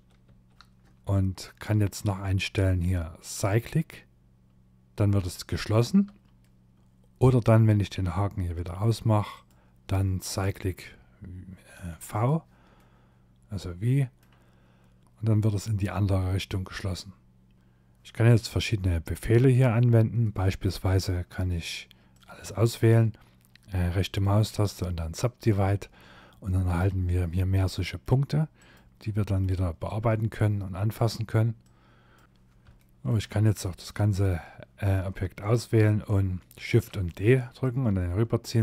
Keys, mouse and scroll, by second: 0.5 shift+middle click, 3.3 click, 3.9 middle click, 4.2 ctrl+middle click, 4.2 scroll up 3, 6.7 click, 8.4 click, 11.2 click, 11.8 middle click, 14.1 middle click, 15.0 middle click, 15.3 middle click, 17.5 scroll down 3, 17.6 middle click, 18.9-19.2 scroll down 1, 19.2 middle click, 21.1 click, 23.0 right click, 24.4 middle click, 26.3-26.6 scroll up 3, 26.6 middle click, 27.6 click, 28.1 middle click, 28.8 click, 30.6 click, 31.4 scroll down 1, 32.2 click, 32.2 scroll down 3, 32.4 ctrl+z, 32.4 shift+middle click, 32.4 click, 35.6 shift+d, 36.6 click, 37.9 middle click.